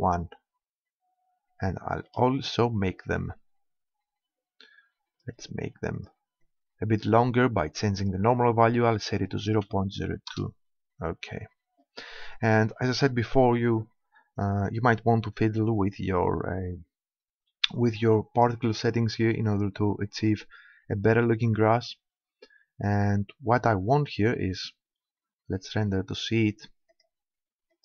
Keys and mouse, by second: 2.9-7.5 middle drag, 7.5 click, 11.4-16.9 middle drag, 24.3-26.9 middle drag, 26.9 click.